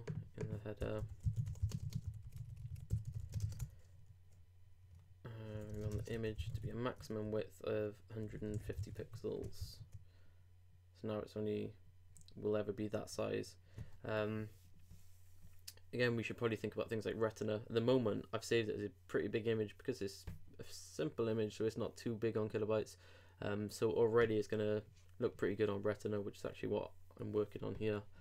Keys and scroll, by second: 3.4 shift+space, 3.6 shift+Return, 5.9 shift+space, 6.0 shift+[, 6.1 shift+Return, 8.7 super+;, 9.0 super+Tab, 9.6 super+r.